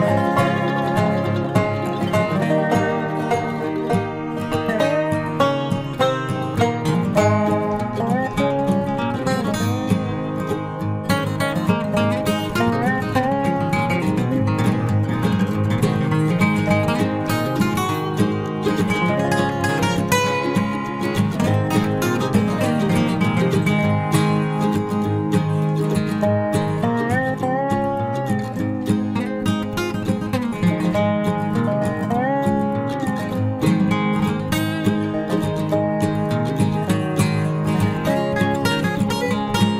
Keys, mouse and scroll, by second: 1.3-3.2 right drag, 2.5 k, 14.6-16.5 right drag, 15.3 k, 22.0 a, 22.7 a, 23.3 a, 23.7 k, 30.5 a, 31.3 k, 38.7 a.